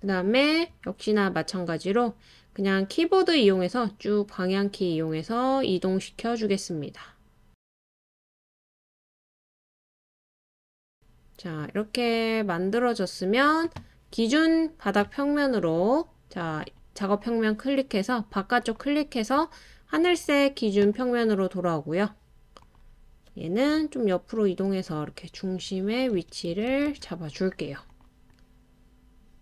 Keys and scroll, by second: 1.3 Up, 1.6 Up, 1.8 Up, 2.3-3.6 Up, 4.0-5.1 Right, 5.9 Up, 6.1 Up, 6.2 Right, 6.4 Up, 6.6 Up, 6.7 Right, 10.7 scroll up 1, 23.8 Left, 24.3 Left, 24.4 Left, 24.5 Left, 24.6 Left, 24.6 Left, 24.7-26.8 Left, 26.3 Right, 26.6 Left, 26.7 Left, 27.0-27.9 Left.